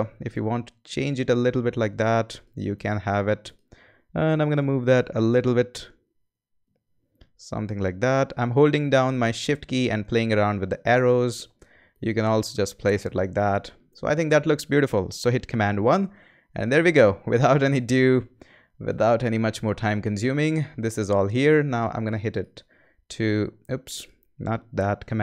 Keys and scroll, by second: 5.0 shift+Left, 5.9 Left, 15.5 super+i, 25.0 super+z.